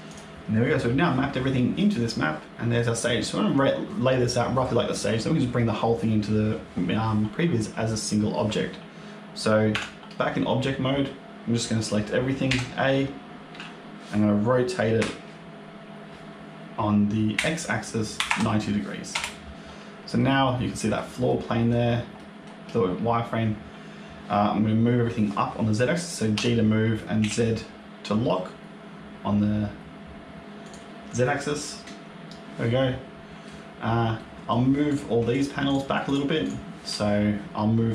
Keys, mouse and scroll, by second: 0.0 click, 0.9-1.5 scroll down 2, 2.5 shift+click, 2.5 middle click, 9.6 Tab, 12.4 a, 14.9 r, 20.1 middle click, 21.2 middle click, 22.0 middle click, 26.2 g, 31.1 middle click, 34.1 middle click, 34.8 click, 35.2 shift+click, 35.6 click, 35.9 shift+click, 36.3 shift+click.